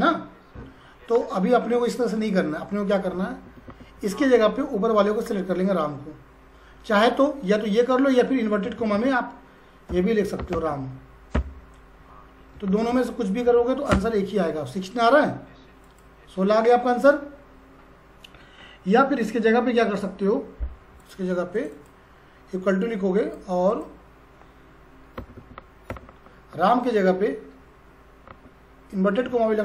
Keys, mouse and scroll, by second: 5.2 click, 9.7-11.3 typing, 12.7 shift+', 13.5 shift+0, 13.9 Return, 15.8 click, 21.0 click.